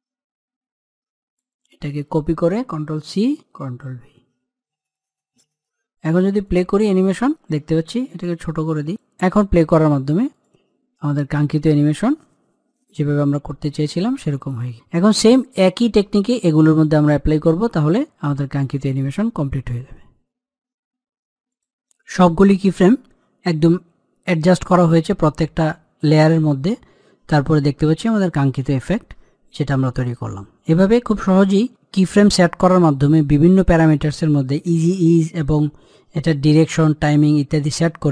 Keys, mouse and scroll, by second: 0.6 u, 1.2 click, 2.4 ctrl+c, 2.9 e, 3.4 click, 4.1 ctrl+v, 5.0-6.2 drag, 8.6 click.